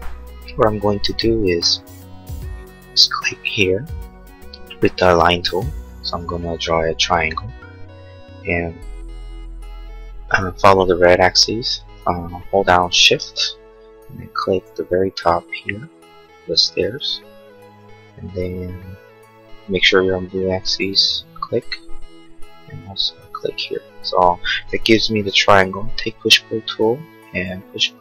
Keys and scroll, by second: 0.6 l, 25.8 p.